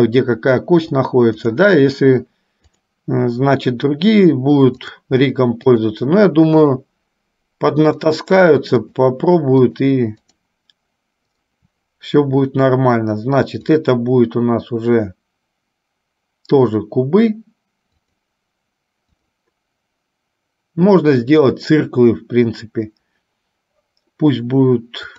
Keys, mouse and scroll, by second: 2.8 click, 4.9 click, 5.9 shift+click, 6.9 shift+click, 8.2 shift+click, 9.2 shift+click, 9.8 shift+click, 10.5 shift+click, 11.7 shift+click, 13.8-18.5 drag, 19.4-25.1 drag.